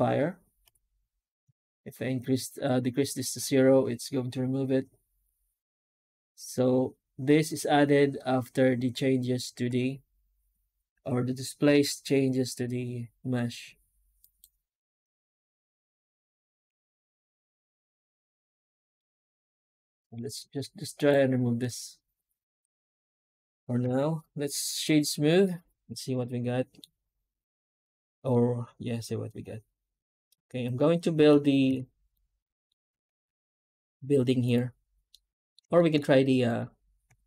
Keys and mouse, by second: 14.1 right click, 15.8 Tab, 16.6 alt+a, 17.9-19.2 middle drag, 19.3 Tab, 20.8 click, 22.5-24.8 right drag, 25.8-27.7 middle drag, 27.7-30.5 right drag, 30.5-31.6 middle drag, 31.6 alt+a, 32.8 ctrl+space, 33.3-33.8 middle drag, 35.0-35.4 middle drag, 35.6 shift+middle drag.